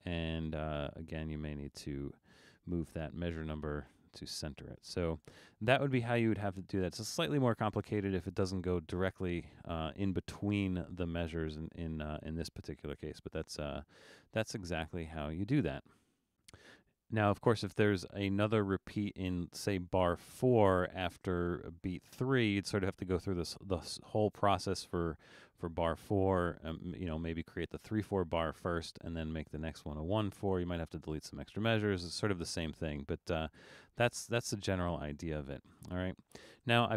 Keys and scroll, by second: 34.7 super+z, 35.2 super+z, 35.8 super+z, 36.6 super+z.